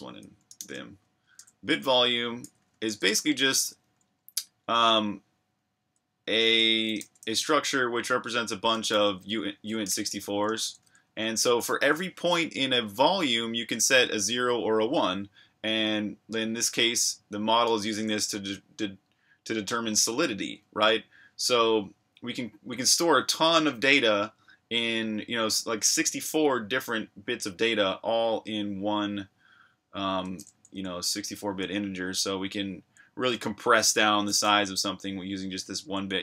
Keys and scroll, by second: 0.0-2.7 typing, 5.6-7.5 typing, 8.7-11.3 typing, 30.7 typing, 32.7 j, 35.8 typing.